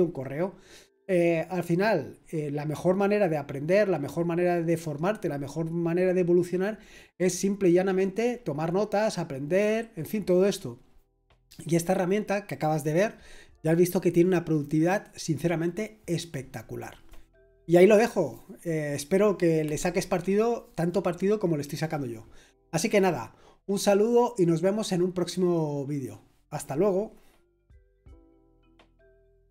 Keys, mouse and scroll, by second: 29.4 click.